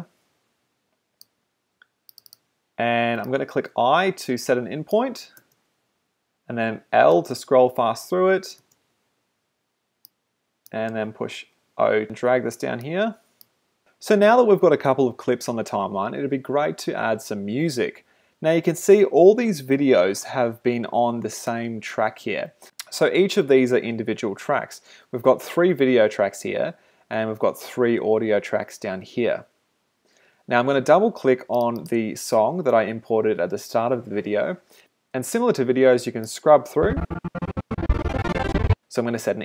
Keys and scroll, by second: 1.6 space, 5.3 i, 5.4 space, 7.2 i, 8.6 space, 9.0 j, 10.9 o.